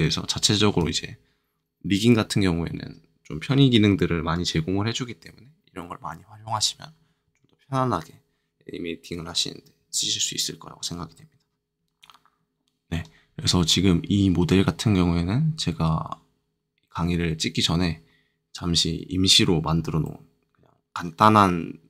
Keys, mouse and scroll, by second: 11.9 KP_Multiply, 11.9-12.9 drag, 20.0-21.8 middle drag.